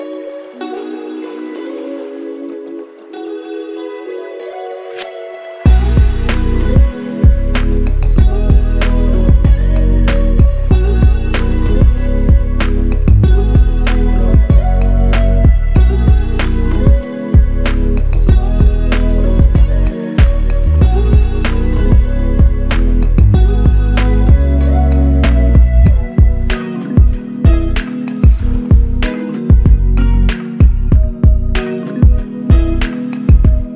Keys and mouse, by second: 0.4 double click, 2.4 shift+click, 6.1 shift+l, 6.9 alt+click, 9.5 shift+click, 14.3-15.1 s, 18.3 shift+click, 20.4 shift+click, 22.4 shift+click, 22.9 alt+click, 24.3 shift+click, 27.4 alt+click, 29.1 alt+click, 30.0 alt+click, 32.8 double click.